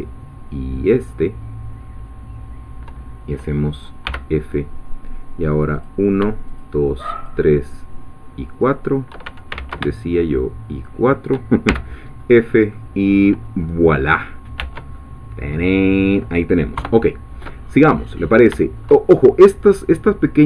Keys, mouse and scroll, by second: 4.1 f, 5.7 click, 6.6 shift+click, 8.6 shift+click, 9.5 ctrl+shift+z, 10.8 shift+click, 11.7 shift+f, 12.1-12.7 shift+scroll down 3, 12.7-13.9 middle drag, 14.1-14.7 scroll down 3, 14.6 Tab, 15.0-16.3 middle drag, 16.8 3, 17.6-18.0 scroll up 2, 18.0-18.5 scroll down 2, 18.6 shift+middle click, 19.1 shift+scroll up 2.